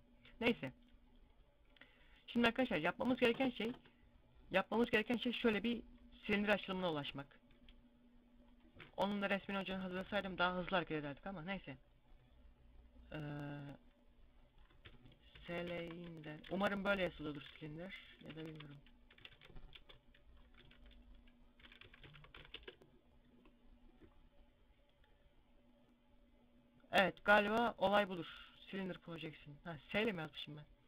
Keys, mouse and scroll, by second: 1.0 click, 1.7 middle click, 3.5 Tab.